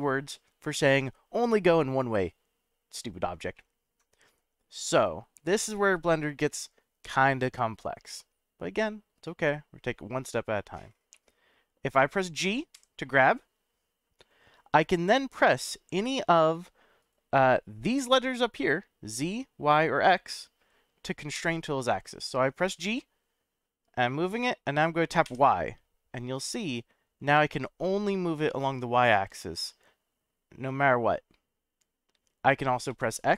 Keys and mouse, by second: 3.6-5.2 middle drag, 11.2-11.9 middle drag, 12.7 g, 17.0 right click, 21.3 g, 25.2 y, 32.9 x.